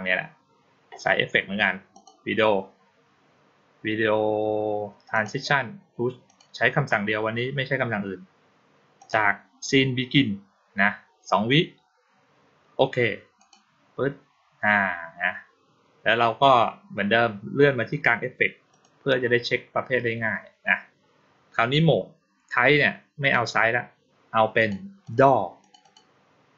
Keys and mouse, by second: 1.8 click, 5.0 click, 6.1 click, 8.8 click, 13.2 click, 18.6 click, 23.1 click, 24.4 click, 24.9 click, 25.5 click, 25.7 click.